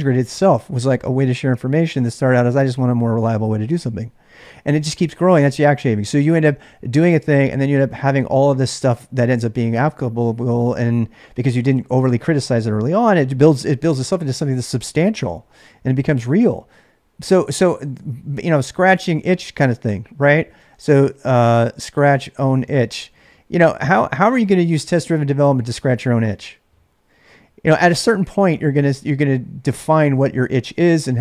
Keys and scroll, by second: 18.6 ctrl+[, 18.8-24.8 typing.